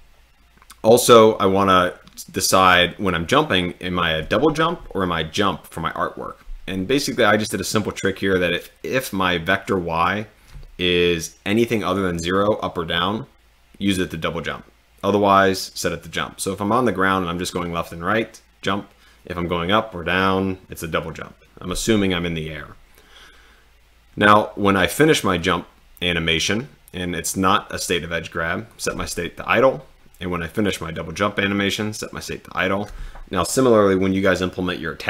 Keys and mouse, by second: 25.4 click, 27.1 click, 28.7 click.